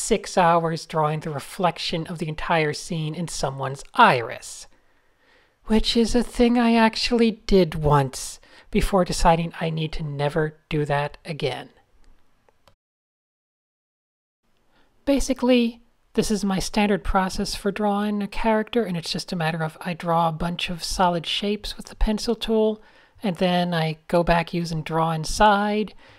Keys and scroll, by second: 1.3 a, 1.9 shift+super+[, 2.6 shift+super+[, 2.8 shift+super+a, 3.5 Tab, 8.6-10.0 typing, 11.4-12.8 typing, 13.4 super+space, 13.5 super+space, 13.8 Tab, 14.2 super+z, 16.6 Tab, 17.0 Tab, 18.0-18.3 typing, 18.7 super+z, 19.1 super+z, 20.4-24.9 typing, 25.9 d.